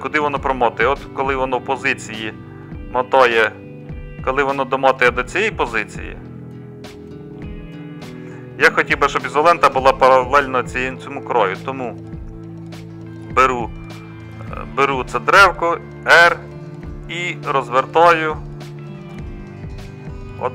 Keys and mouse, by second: 4.3-5.4 drag, 16.1 r.